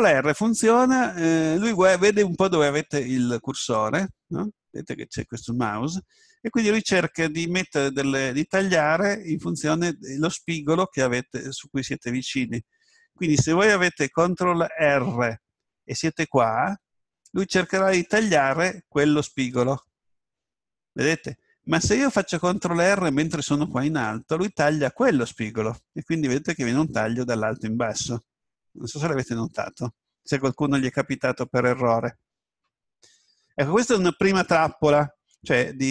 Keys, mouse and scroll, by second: 16.8 ctrl+r.